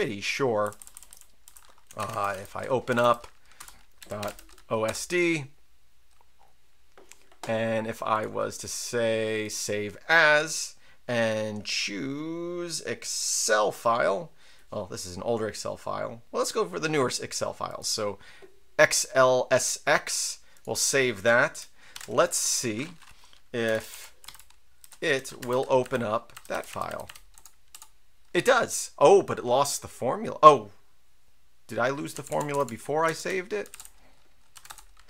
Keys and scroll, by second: 0.0-6.2 typing, 4.8 Return, 21.9 super+q, 23.4-25.8 typing, 25.8 Tab, 26.3 Tab, 26.5 Tab, 26.7 Tab, 26.9 Tab, 27.0 Tab, 27.3 Return, 27.7 Return, 32.1 Down, 32.3 Down, 32.4 Right, 32.5 Down, 33.0 Down, 33.7-34.5 typing, 34.7 Return.